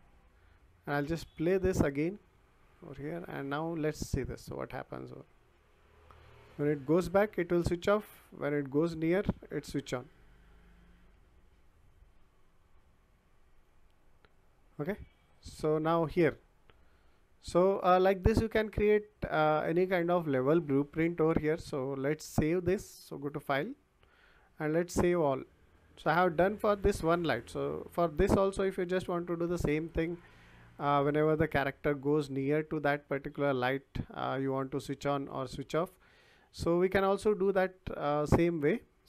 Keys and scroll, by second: 3.2 w, 5.9 s, 7.6 w, 9.7 s, 11.4 w, 14.8 w, 19.7 Escape.